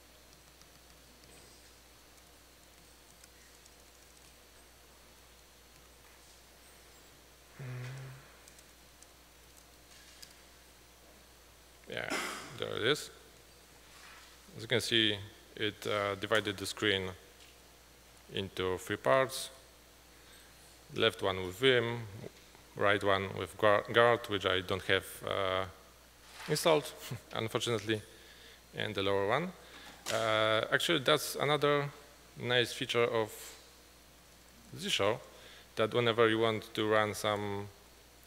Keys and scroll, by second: 0.4 ctrl+=, 0.6 ctrl+=, 0.7 ctrl+=, 0.8 ctrl+=, 1.0 ctrl+=, 1.8-5.9 typing, 33.9 ctrl+t, 34.3 ctrl+=, 34.5 ctrl+=, 34.6 ctrl+=, 34.8 ctrl+=, 36.9-37.9 typing.